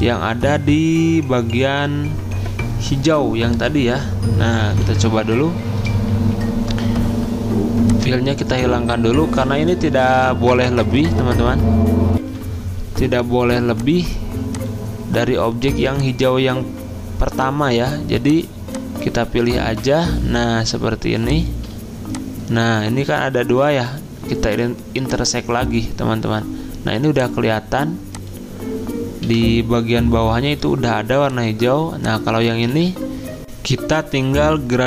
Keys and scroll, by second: 15.1 F10, 19.3 ctrl+z, 23.4 ctrl+z, 29.3 Delete, 32.7 ctrl+z, 33.4 F9.